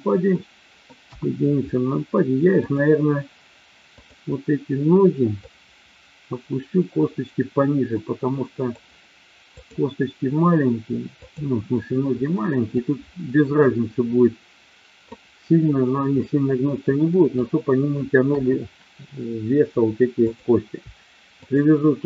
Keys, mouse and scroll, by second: 0.3 middle click, 1.0 KP_1, 2.5 click, 4.0 click, 5.5-8.7 drag, 9.5 click, 12.6-15.0 drag, 16.1-17.3 middle drag, 18.2 KP_1, 20.2 click, 21.3 shift+click.